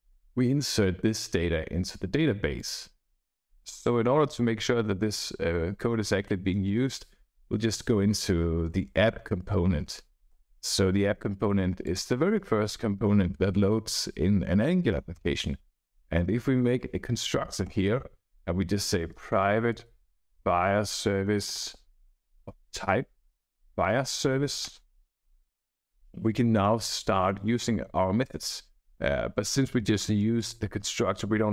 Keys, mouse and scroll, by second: 0.0 Right, 2.5 click, 7.6 a, 8.6 p, 8.7 p, 10.2 Return, 11.8 click, 14.9 Return, 16.6-17.5 typing, 17.6 Return, 18.7-23.8 typing, 24.6 Return, 25.3 Right, 25.5 Right, 25.9 Right, 26.5 Return, 30.3 click.